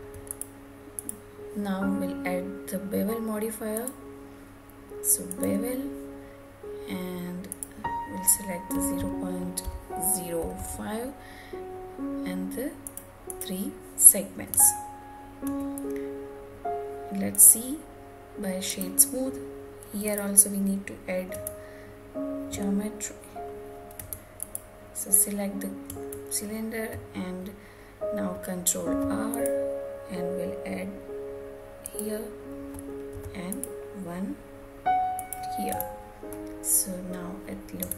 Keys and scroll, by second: 10.1 Return, 14.2 Tab, 20.9 Tab, 28.5 ctrl+r, 35.2 Tab.